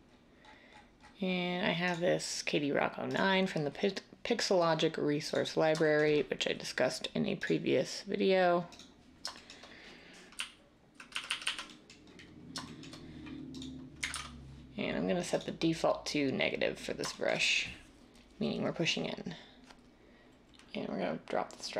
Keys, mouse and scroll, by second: 10.3-11.0 ], 11.2 ], 11.4 ], 14.0 ctrl+z.